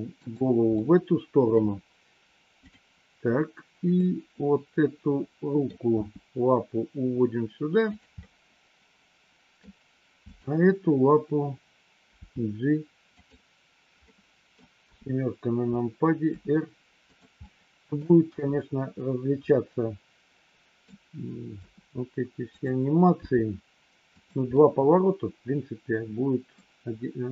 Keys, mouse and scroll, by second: 0.8 middle click, 3.9-5.5 middle drag, 5.9 g, 8.2-9.7 middle drag, 10.2 click, 12.2 g, 13.9 middle click, 14.8 KP_7, 16.2 r, 17.3 middle click, 18.2 KP_1, 19.4-20.8 middle drag, 21.5 r, 23.0 g, 24.5-26.5 middle drag.